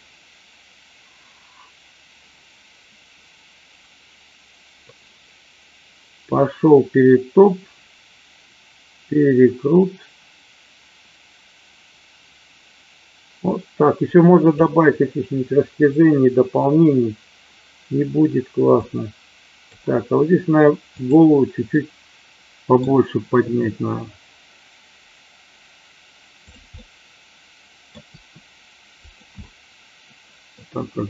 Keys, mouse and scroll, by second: 18.8 click, 20.9 click, 21.7 middle click, 23.4 r, 26.7-27.8 middle drag, 27.9 r, 29.0 click, 29.5-30.6 middle drag, 30.7 r.